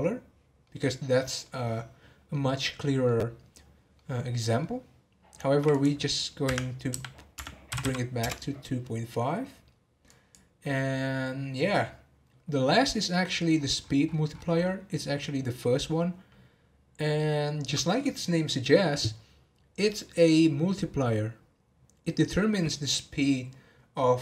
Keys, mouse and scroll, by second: 0.6-5.7 middle drag, 5.7-7.8 drag, 7.8 m, 10.1-13.2 drag, 13.3-14.5 scroll up 25.